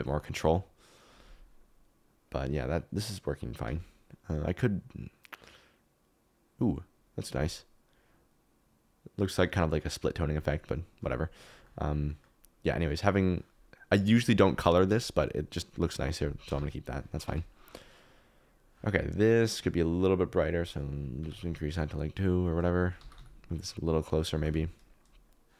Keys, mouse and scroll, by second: 11.6 middle click, 12.7 click, 17.6 Escape, 19.4-21.2 drag, 22.9 g, 23.1 y, 24.3 g, 24.5 z, 24.8 click.